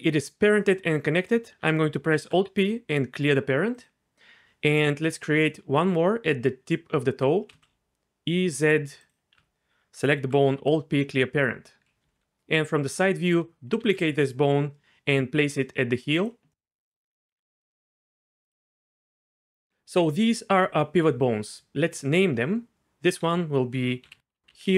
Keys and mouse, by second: 1.2 right click, 2.0 alt+p, 4.7 click, 7.2 e, 7.5 z, 8.6 click, 9.1 click, 10.1 alt+p, 12.0 KP_3, 13.8 shift+d, 16.1 click, 17.3 g, 17.6 x, 18.4 click, 23.2 F2.